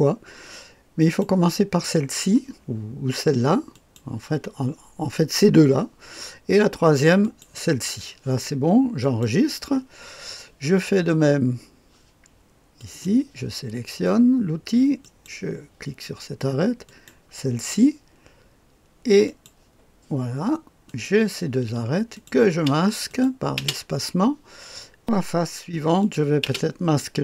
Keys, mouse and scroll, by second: 0.9 click, 3.7 click, 7.2 click, 8.9 click, 12.7 click, 15.0 click, 16.8 click, 19.2 click, 20.8 click, 22.1 click, 22.4 space, 23.0 click, 23.5 space, 26.0 click, 26.4 space.